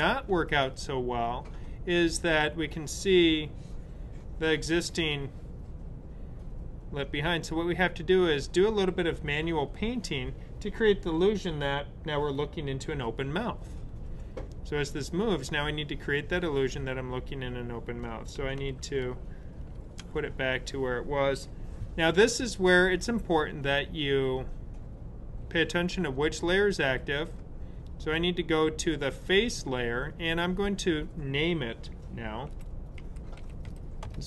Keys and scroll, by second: 18.6 super+z, 32.2-34.1 typing.